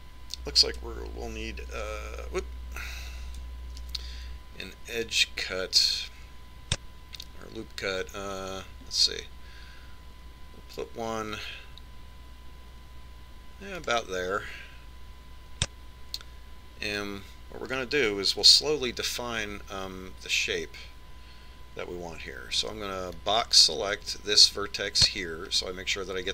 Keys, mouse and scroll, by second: 3.4 ctrl+e, 5.5 ctrl+r, 18.6 z, 20.1 a, 24.4 b.